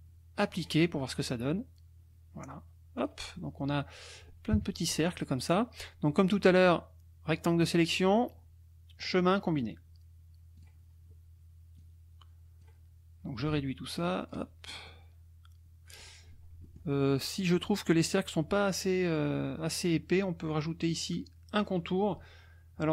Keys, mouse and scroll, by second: 0.5 click, 3.0 click, 3.4 middle click, 3.7 click, 4.5 KP_Subtract, 6.4-7.8 drag, 9.0 click, 10.6 click, 11.8 click, 13.5 ctrl+click, 14.9-16.2 ctrl+drag, 17.1 click.